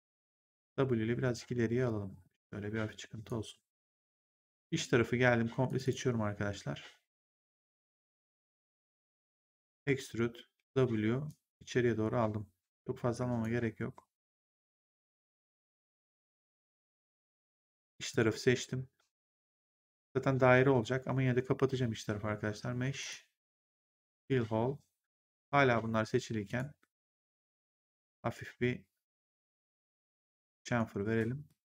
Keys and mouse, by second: 1.2 click, 5.6 click, 9.6 click, 10.5 w, 11.2 click, 17.8 click, 22.9 click, 24.0 click, 26.4 click, 27.6 click, 29.9 click, 31.4 right click.